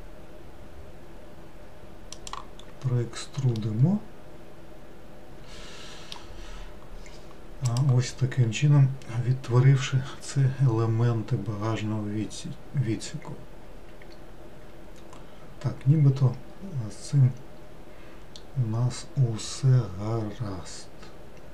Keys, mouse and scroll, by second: 2.7-3.3 scroll up 3, 3.6-6.5 middle drag, 6.5-9.2 scroll down 2, 9.2-9.7 scroll down 1.